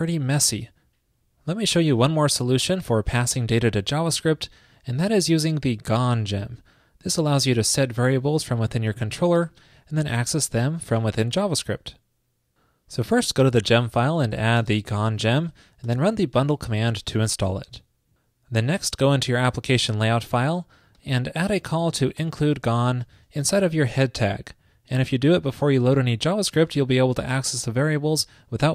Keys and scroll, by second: 15.7 super+Right, 16.2 super+s, 21.8 ctrl+shift+<, 23.8 ctrl+shift+>.